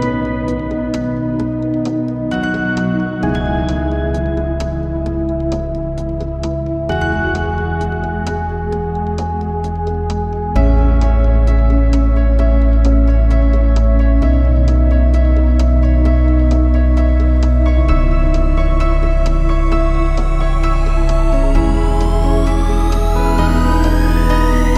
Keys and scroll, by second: 2.7 a, 6.6 Escape, 17.9 Escape, 19.7 Escape.